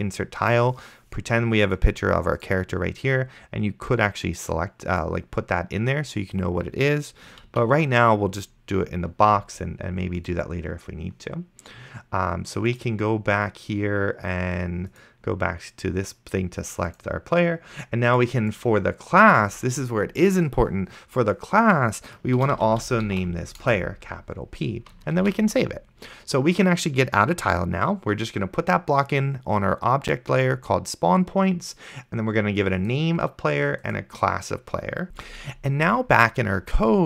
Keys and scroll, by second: 7.8 ctrl+z, 22.4-23.7 typing, 25.5 ctrl+s, 35.1 ctrl+super+Left.